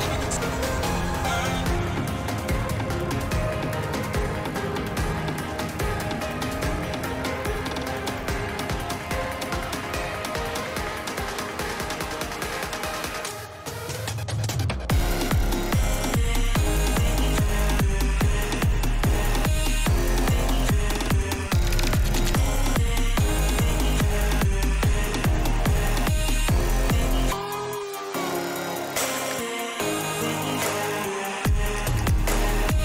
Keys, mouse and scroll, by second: 0.3 shift+middle click, 0.7 shift+middle click, 1.2 shift+middle click, 2.6 g, 5.2 shift+middle click, 5.7 click, 6.8 click, 7.5 shift+middle click, 8.0 shift+middle click, 10.8 click, 12.0 n, 12.7-13.9 drag, 14.5 middle click, 14.9 click, 16.0 click, 17.1 click, 18.8 shift+middle click, 19.5 click, 20.5 shift+middle click, 21.0 click, 22.3-23.5 ctrl+drag, 23.5-25.5 ctrl+middle drag, 23.5-24.8 drag, 23.5-24.8 right drag, 25.5-27.2 ctrl+drag, 27.8 shift+middle click, 28.5 shift+middle click, 28.9 click, 30.0-31.5 drag, 32.1 shift+middle click.